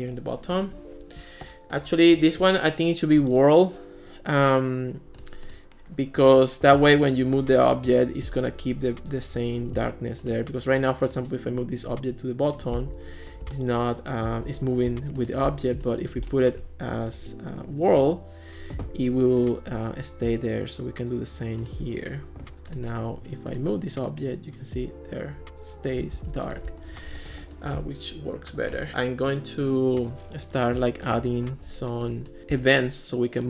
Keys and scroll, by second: 12.8 super+z, 26.2 super+z.